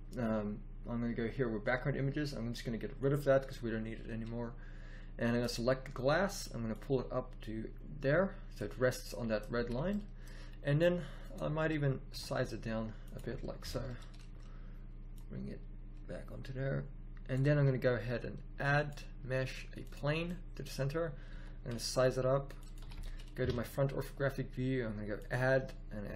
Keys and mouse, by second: 2.9-5.8 drag, 6.6-7.2 middle drag, 7.4 click, 8.8-9.4 middle drag, 9.5 a, 12.1 s, 13.6 KP_1, 17.5 a, 19.9 a, 21.2 s, 22.7 a, 23.3 KP_1.